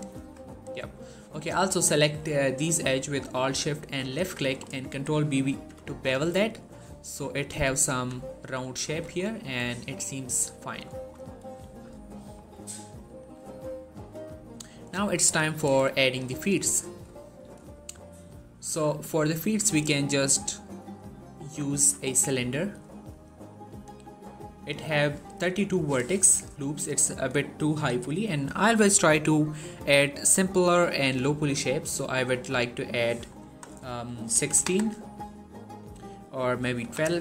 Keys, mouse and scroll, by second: 0.3 click, 3.5 alt+shift+click, 4.3 middle click, 5.3 ctrl+b, 6.4-7.2 scroll up 1, 7.2 click, 7.5 middle click, 7.7 1, 8.7 Tab, 9.0-9.9 scroll down 1, 10.4 shift+scroll down 1, 10.5 shift+middle click, 11.0 scroll down 1, 12.2-12.7 scroll up 1, 12.8 shift+middle click, 13.3 scroll up 1, 15.7 shift+middle click, 17.1 shift+middle click, 17.6 shift+a, 19.2 shift+a, 23.5 click, 35.7 click.